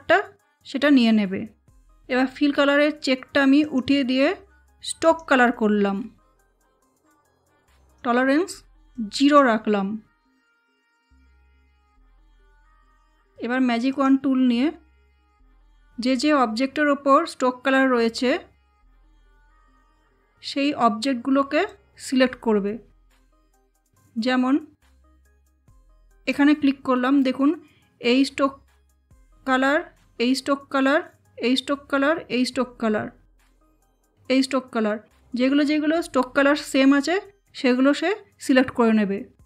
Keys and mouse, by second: 3.5 click, 7.8-10.6 drag, 13.8 click, 18.7 click, 21.6 click, 26.1 click.